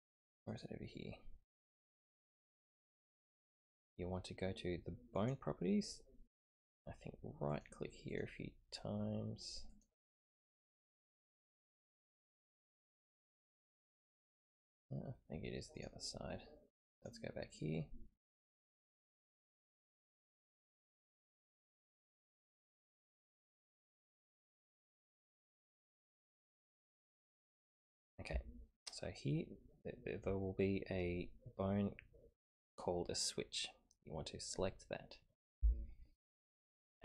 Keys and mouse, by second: 0.5 click, 1.6 click, 5.2 click, 7.5 click, 8.1 click, 9.7 click, 10.5 click, 11.1 click, 11.7 click, 12.8 click, 13.8-15.8 right drag, 15.8 click, 16.9 click, 19.4 right click, 20.8 click, 22.0 right click, 22.7 click, 23.7 click, 24.5 click, 25.3-26.5 drag, 27.2 click.